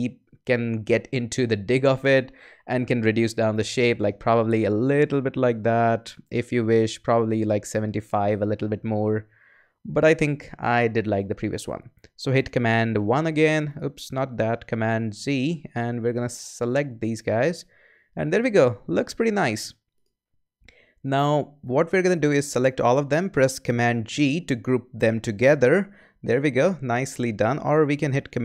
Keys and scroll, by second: 10.5 super+z, 12.9 super+i, 14.7 z, 23.9 super+g.